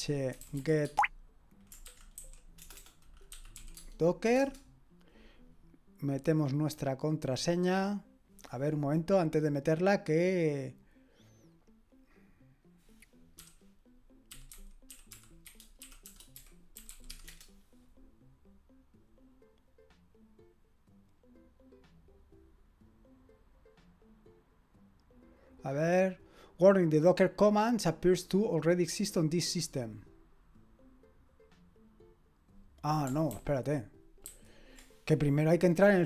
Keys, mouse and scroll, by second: 0.0-3.8 typing, 4.4 Return, 5.0-5.7 typing, 11.5 click, 32.8 click, 33.3 ctrl+c, 34.3 ctrl+c.